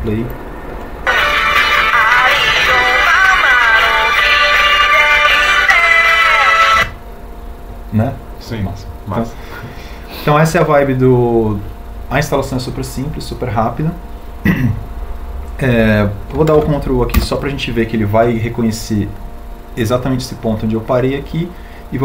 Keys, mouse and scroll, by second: 0.0 space, 17.0 ctrl+u.